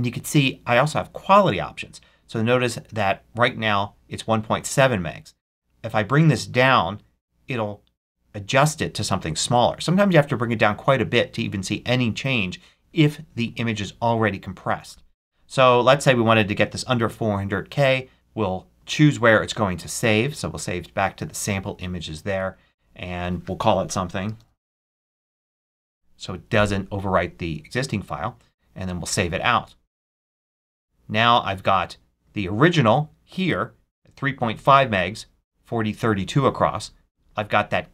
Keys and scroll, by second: 23.9-26.0 typing.